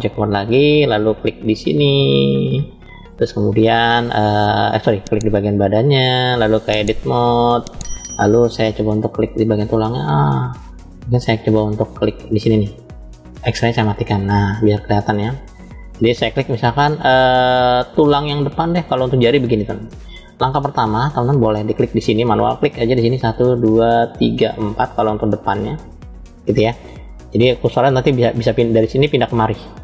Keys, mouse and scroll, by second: 0.9 drag, 1.9 click, 3.1 click, 4.8 click, 6.1-7.4 drag, 8.6-10.5 middle drag, 8.6 scroll up 1, 13.1 click, 14.1-16.3 middle drag, 18.0-19.8 shift+middle drag, 22.3 click, 23.3 shift+click, 24.1 shift+click, 25.2 shift+click.